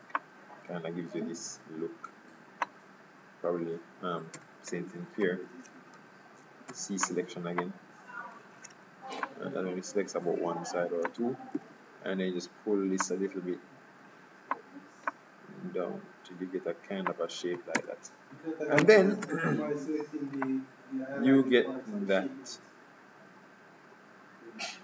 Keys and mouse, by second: 0.3-2.1 drag, 4.4 c, 5.4 Escape, 6.1 a, 6.8 c, 11.7 KP_3, 13.2-15.0 drag, 15.2-17.1 drag, 17.9 Tab, 19.3 z.